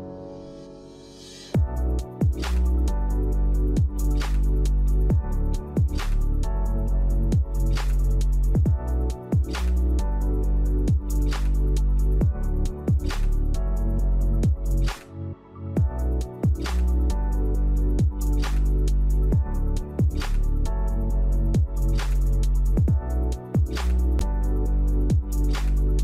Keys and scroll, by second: 1.5 v, 2.9 shift+Down, 9.6 shift+Right, 9.8 shift+Right, 9.9 shift+Right, 16.1 1.